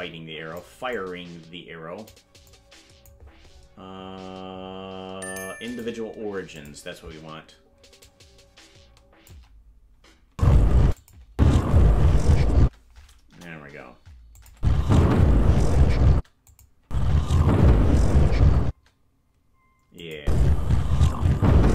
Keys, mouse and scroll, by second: 1.0-2.1 drag, 2.5 click, 5.6-6.7 drag, 8.0-9.3 shift+drag, 10.3 space, 10.9 space, 11.0 click, 11.3 space, 12.6 space, 13.3 KP_0, 14.4-16.2 drag, 14.5 space, 16.1 space, 16.5 click, 16.8 space, 18.6 space, 20.0-21.7 drag, 20.2 space.